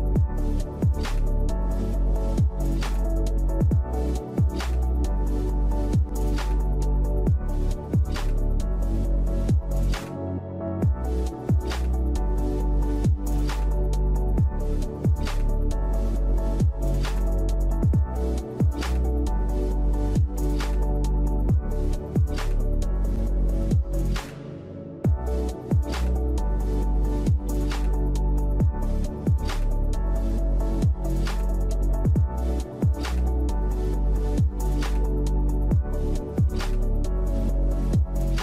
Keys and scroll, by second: 9.1-14.9 typing, 17.0-17.7 typing, 23.5 shift+Right, 23.6 shift+Right, 32.2 Up, 32.2 Up, 33.6 Delete, 36.7 Delete, 38.0 Delete.